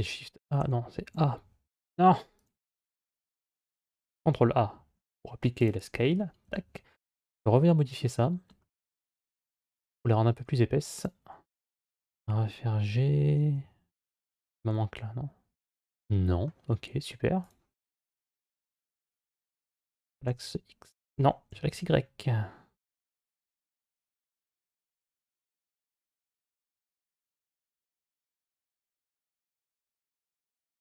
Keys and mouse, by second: 0.9 a, 1.6 Escape, 4.1 ctrl+a, 6.3 Tab, 9.5-10.9 drag, 12.0 g, 13.8-16.3 middle drag, 17.3 click, 18.4 g, 23.9-26.5 middle drag, 28.0 ctrl+a, 29.1 a, 29.8 g.